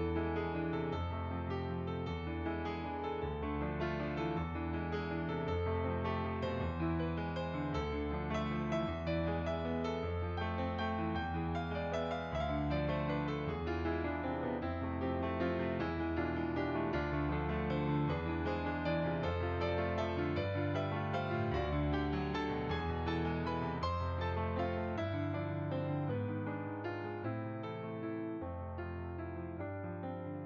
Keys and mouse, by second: 0.2 click, 2.3 shift+r, 3.3 click, 3.8 ctrl+r, 4.6 shift+click, 5.8 middle click, 6.2 shift+click, 6.7 middle click, 7.2 shift+click, 7.9 middle click, 8.3 shift+click, 10.2 shift+click, 10.9 middle click, 11.3 shift+click, 11.9 middle click, 12.4 shift+click, 12.8 middle click, 13.9 click, 16.2 middle click, 16.7 click, 17.7 middle click, 18.2 click, 24.4 shift+click, 25.2 middle click, 26.1 middle click, 27.2 click, 28.3 middle click, 29.2 click.